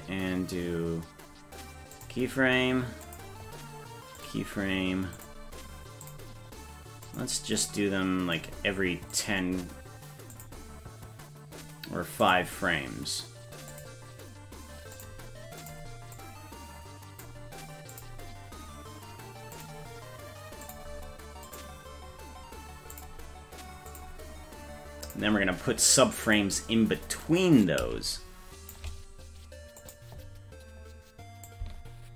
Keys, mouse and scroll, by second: 2.0 click, 3.1 click, 4.2 click, 5.2 click, 6.1 click, 7.1 click, 7.7 click, 9.1 click, 10.4 click, 12.2 click, 13.7 click, 15.0 click, 15.6 click, 16.2-17.3 drag, 17.9 click, 19.6 click, 20.7 click, 21.5 click, 22.9 click, 23.9 click, 25.1 click, 26.3 click, 27.7-28.8 shift+drag, 29.8 click, 31.5 shift+click.